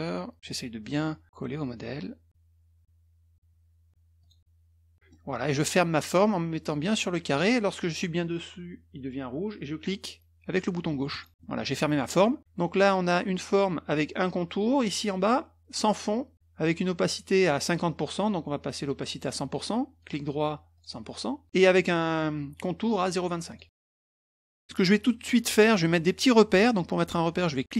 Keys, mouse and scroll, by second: 0.4 click, 4.2 click, 4.9 middle click, 11.1 click, 11.4 middle click, 20.0 right click, 20.7 click, 21.5 right click, 23.5 click, 23.7 middle click, 23.8-24.2 scroll down 1, 24.3-24.9 scroll up 2.